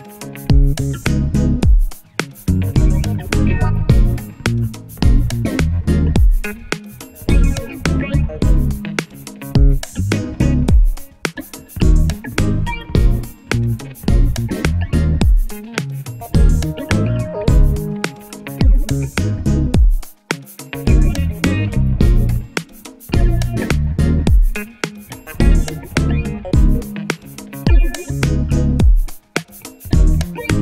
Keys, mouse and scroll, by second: 0.4 shift+Down, 0.5 shift+Down, 1.3 click, 3.0 Down, 3.1 Down, 3.7 Right, 3.8 Right, 3.9 Right, 4.2 Down, 4.4 Up, 4.7 click, 5.9 z, 6.9 click, 8.0 shift+Up, 8.5 shift+Left, 9.4 click, 10.0 alt+scroll up 1, 10.4-13.6 drag, 16.2-22.1 drag, 23.2 KP_0, 26.2-29.6 drag.